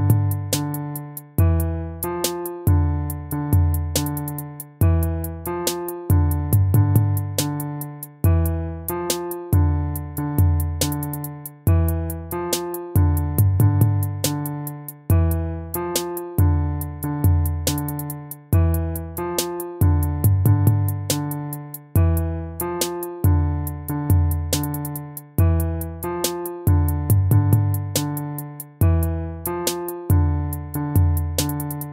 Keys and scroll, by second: 6.4 ctrl+z, 8.5 ctrl++, 30.0 ctrl+z, 31.2 ctrl+z.